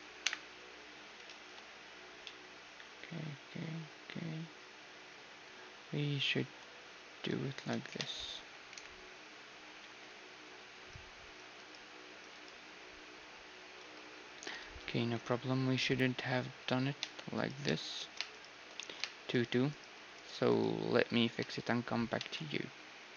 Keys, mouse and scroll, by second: 0.2 KP_1, 1.3 ctrl+z, 2.2-5.7 middle drag, 7.2 a, 7.6-9.8 right drag, 7.9 Tab, 8.7 KP_1, 9.8 2, 11.6-14.3 right drag, 14.3 2, 14.6 1, 15.1 2, 15.7 middle click, 16.1 1, 17.0 Tab, 17.3-23.1 right drag, 18.3 Tab, 19.3-20.8 middle drag, 22.2 Tab.